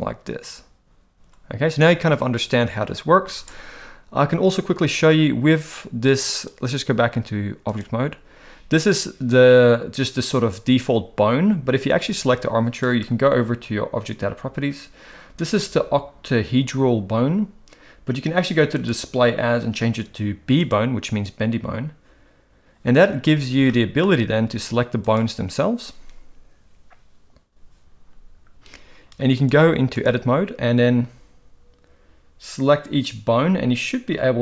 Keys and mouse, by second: 6.4-7.8 drag, 12.1 click, 18.8-20.7 drag, 23.7 shift+middle click, 29.6 click.